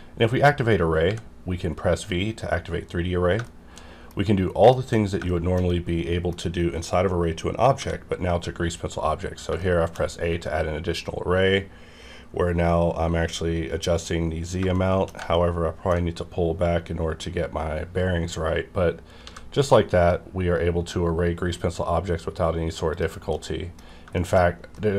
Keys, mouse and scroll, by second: 1.0 x, 1.7-2.1 scroll up 1, 3.3 scroll up 1, 3.4-7.8 shift+middle drag, 7.8 a, 8.9-9.5 scroll up 1, 9.6 shift+middle click, 14.7 shift+Num_Lock, 14.7 shift+middle click, 15.3 shift+middle click, 17.9-19.1 scroll up 2, 19.1 scroll up 1, 19.2 a, 20.2-22.9 scroll up 2, 22.9 click, 23.3 middle click, 23.8 scroll up 1, 24.1 shift+middle click, 24.5 scroll down 1, 24.7 middle click.